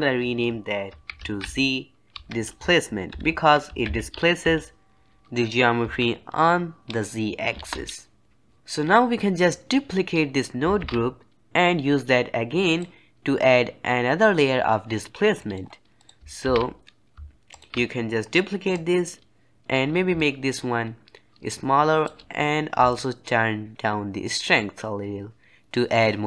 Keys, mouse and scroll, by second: 10.7 shift+d, 15.3-15.9 middle drag, 15.9 click, 16.3 shift+d, 18.6-19.6 drag, 19.6-20.1 scroll up 3, 20.1-25.8 shift+drag.